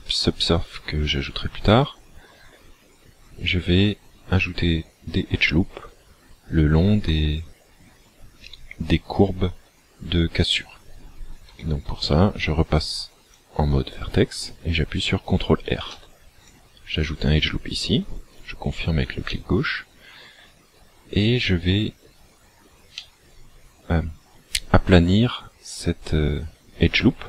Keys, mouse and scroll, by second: 13.2 click, 15.8 ctrl+r, 18.5 click, 19.3 middle click, 23.0 middle click.